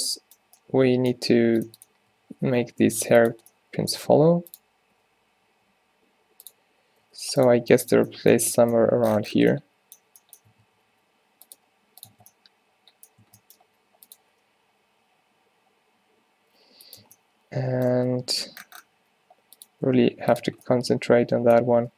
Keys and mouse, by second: 0.1 Tab, 0.4 click, 2.2 a, 2.4 a, 2.6 g, 4.3 g, 5.0 g, 7.1 r, 7.6 g, 8.5 Tab, 10.6 Tab, 10.8 r, 11.6 g, 12.2 Tab, 13.3 Tab, 14.1 r, 14.4 g, 17.1 Tab, 18.0 Tab, 19.1 r, 19.9 g, 20.6 Tab.